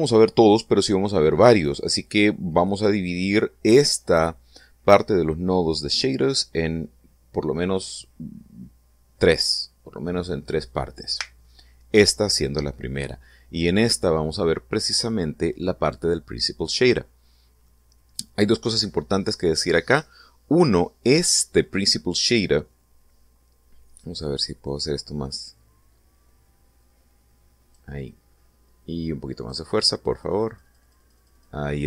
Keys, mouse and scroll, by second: 1.6-2.2 scroll up 4, 17.0-18.3 middle drag, 24.6-28.5 drag, 29.9-31.8 drag.